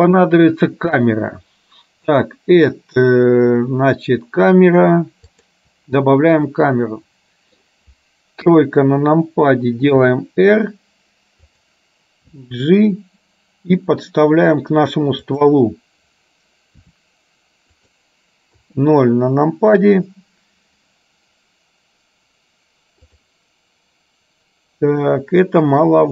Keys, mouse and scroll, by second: 2.2-5.7 drag, 6.7-7.7 middle drag, 8.6 KP_3, 10.1 r, 12.3 g, 16.9 r, 18.7 KP_0.